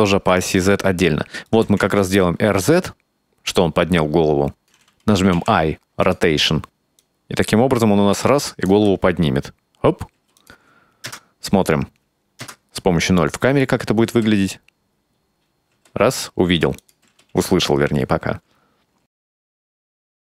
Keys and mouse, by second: 0.6-1.6 middle drag, 1.6 r, 5.4 typing, 7.1-8.7 drag, 8.8 space, 10.2 space, 10.4 click, 11.1 KP_0, 12.5 KP_0, 14.2 space, 15.8 space, 16.9 click, 17.1 space.